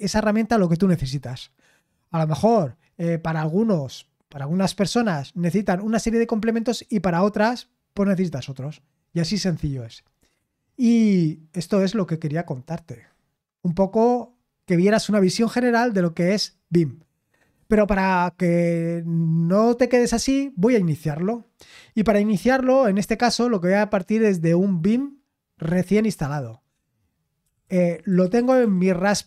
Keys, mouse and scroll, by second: 17.7 super+l, 27.1-29.2 typing.